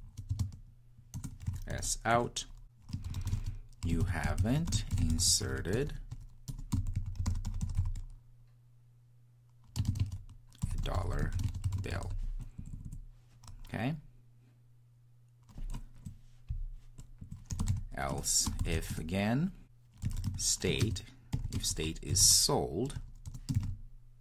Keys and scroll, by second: 18.1 Return.